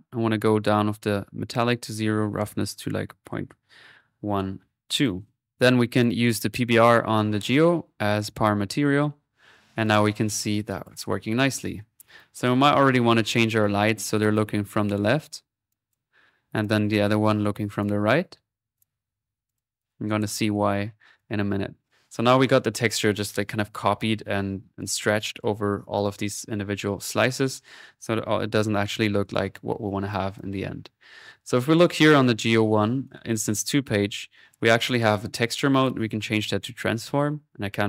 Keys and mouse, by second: 0.9-2.2 drag, 5.5-7.3 drag, 9.4 middle click, 9.8 click, 10.7 click, 11.4 middle click, 12.2 click, 13.3 click, 13.6 middle click, 13.8 click, 14.3-16.5 drag, 16.5-19.4 drag, 19.5 click, 19.8 middle click, 20.3-21.7 drag, 32.0 click, 33.0 click, 35.8-37.1 drag.